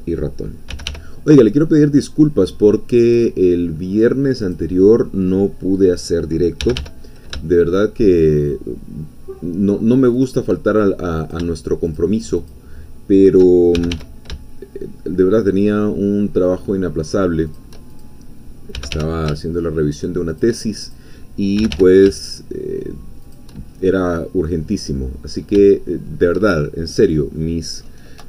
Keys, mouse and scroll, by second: 0.8 g, 0.9 y, 3.1 click, 4.6-6.6 drag, 6.6 g, 6.8 y, 10.1 shift+click, 11.2 shift+click, 12.0 shift+click, 13.7 shift+g, 14.0 shift+y, 17.5 shift+click, 18.0 shift+click, 18.8 g, 18.9 y, 20.3 shift+click, 20.9 shift+click, 21.6 g, 21.7 y, 23.2 shift+click, 23.7 shift+middle click, 24.0-25.1 middle drag, 25.3-25.6 scroll up 2, 25.7 shift+middle click, 26.6-27.0 shift+scroll down 3, 27.0 middle click.